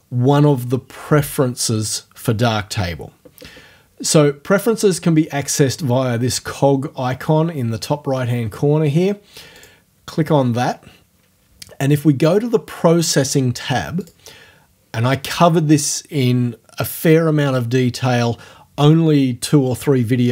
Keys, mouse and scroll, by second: 9.6 click, 14.0 click.